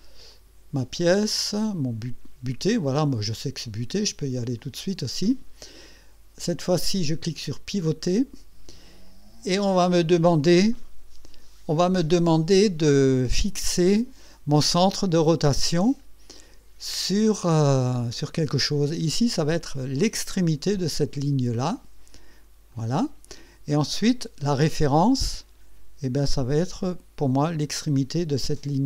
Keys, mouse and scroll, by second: 0.3 click, 2.0 click, 2.8 click, 3.6 click, 4.6 click, 7.8 click, 22.7 click.